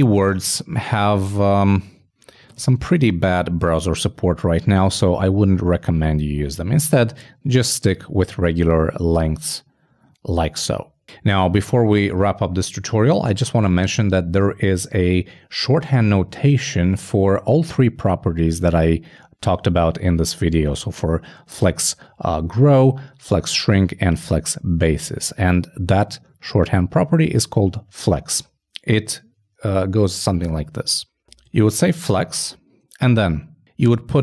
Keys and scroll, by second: 2.9 super+m, 3.1 super+s, 31.6-32.5 typing.